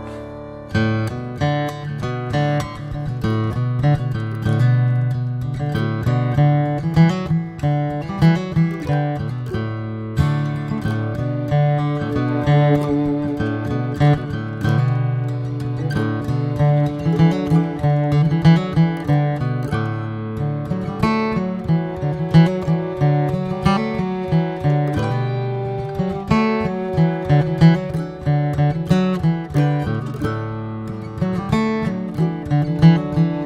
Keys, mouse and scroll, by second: 7.3 scroll up 2, 10.7-12.5 drag, 15.0 scroll up 1, 15.4-18.1 middle drag, 18.1-20.4 drag, 20.4 middle drag, 20.6 scroll up 1, 20.9-21.3 scroll down 2, 21.3-24.2 shift+middle drag, 24.2 scroll up 1, 25.6-29.5 drag, 29.5-29.9 scroll down 1, 29.9 middle drag, 30.1-30.5 scroll up 1, 30.5-31.2 middle drag, 31.2 scroll up 1, 31.4-33.4 middle drag.